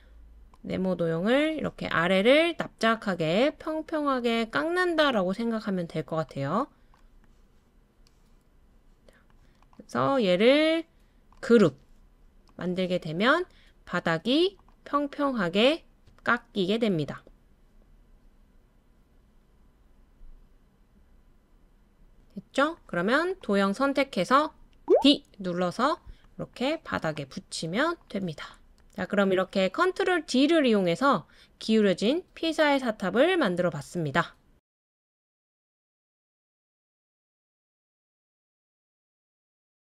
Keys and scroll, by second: 24.6-25.5 typing.